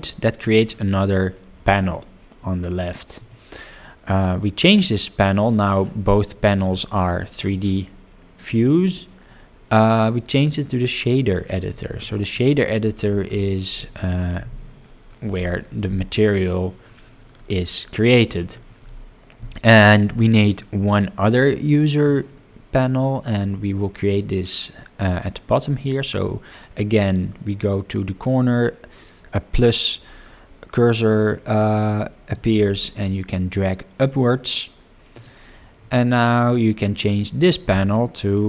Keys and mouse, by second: 3.2 click, 6.2-6.6 middle drag, 7.0-7.5 middle drag, 8.6-11.4 drag, 12.2 middle click, 13.3 middle drag, 14.4 n, 16.2-16.7 middle drag, 18.2 middle click, 19.7 middle click, 20.5-22.1 middle drag, 32.3-34.1 drag, 35.1-38.4 drag.